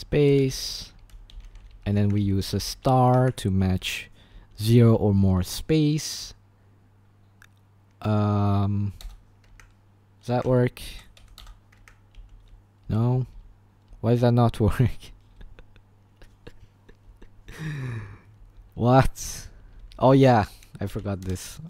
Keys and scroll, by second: 0.0-5.7 typing, 2.1 Escape, 3.2 Escape, 9.0 Return, 9.6 Escape, 10.2-15.5 typing, 11.8 Escape, 17.0-20.9 typing, 21.2 Return.